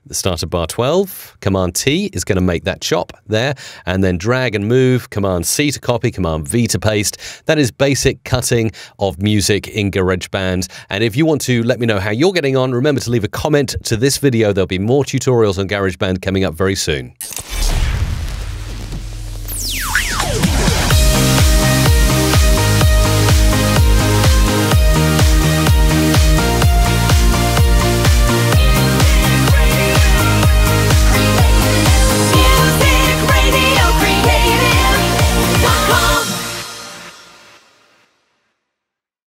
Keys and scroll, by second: 0.8 super+t, 2.2 super+t.